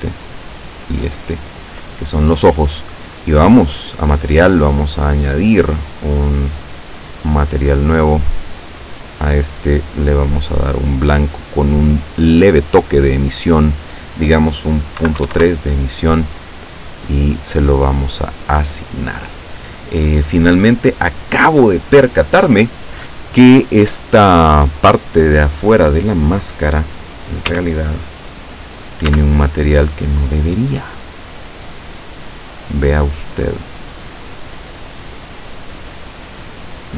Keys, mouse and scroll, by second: 0.5 shift+right click, 3.6 click, 7.4 click, 9.6 click, 12.5 scroll down 2, 13.2 click, 15.1 KP_Decimal, 15.3 KP_3, 15.4 KP_Enter, 17.1-17.6 scroll up 2, 18.3 click, 27.5 a, 29.1 c, 29.7-36.9 drag.